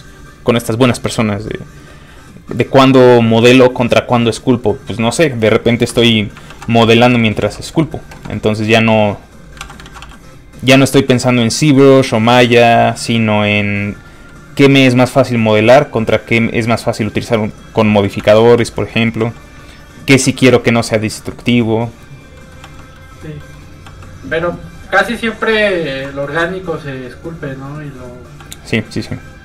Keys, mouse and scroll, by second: 5.9 i, 6.5 shift+f, 6.7 click, 7.0 click, 7.2 middle click, 7.4 f, 7.5 click, 7.7 middle click, 8.8 click, 9.6 ctrl+z, 10.4 click, 10.9 f, 11.0 click, 11.8 middle click, 12.2 click, 12.4 middle click, 13.5 click, 14.3 middle click, 15.4 click, 15.8 middle click, 18.2 k, 18.6 f, 18.7 click, 18.9 middle click, 19.2 f, 19.3 click, 20.5 f, 20.6 click, 22.4 middle click, 22.4 click, 22.6 f, 22.8 click, 22.9 middle click, 23.8 f, 23.9 click, 25.2 middle click, 25.5 f, 25.6 click, 25.9 shift+middle click, 26.1 middle click, 26.7 click, 28.4 f, 28.5 click, 28.9 click.